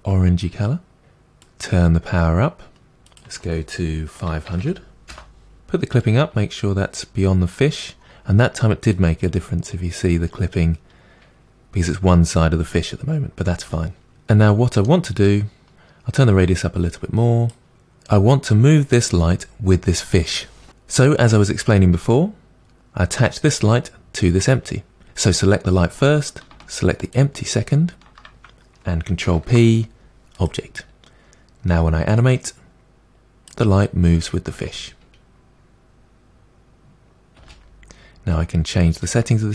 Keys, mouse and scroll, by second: 1.7-5.1 drag, 5.1 0, 6.4-11.9 drag, 14.1-15.7 middle drag, 15.7-17.3 drag, 17.7-27.2 middle drag, 27.2 shift+click, 30.5 ctrl+p, 32.2-33.9 drag, 33.9-34.5 scroll down 5, 34.5 space, 37.4 space, 37.7-38.9 scroll up 3, 38.9 click.